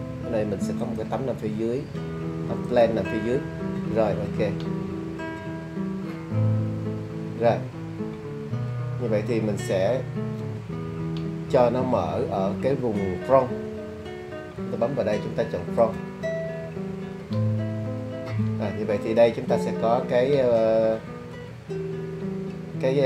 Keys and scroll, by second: 14.6 `.